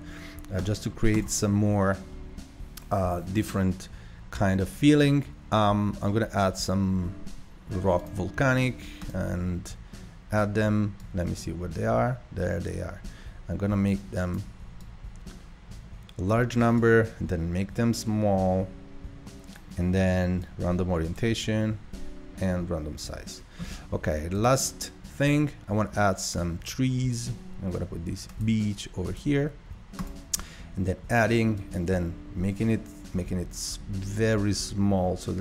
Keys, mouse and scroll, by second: 0.7-4.3 drag, 9.0-14.2 drag, 14.9-20.0 drag, 20.6-34.7 drag.